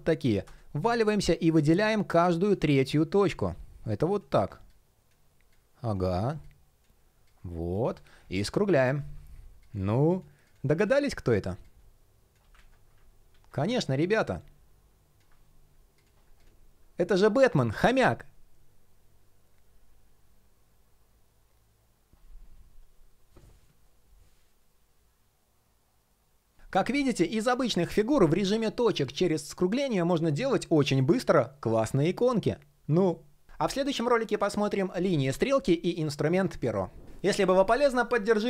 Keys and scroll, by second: 10.4 super+y, 12.1 super+y.